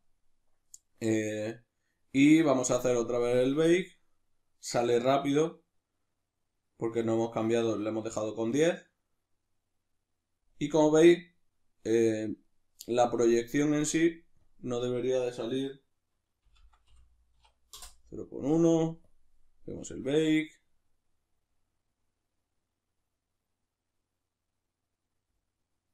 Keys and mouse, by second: 10.8-14.4 middle drag, 14.4-25.9 drag, 17.8 Return.